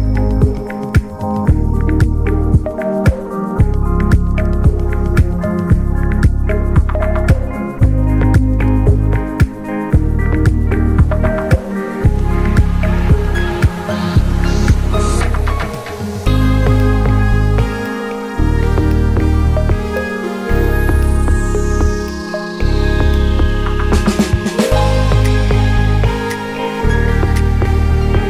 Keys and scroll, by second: 25.9 k.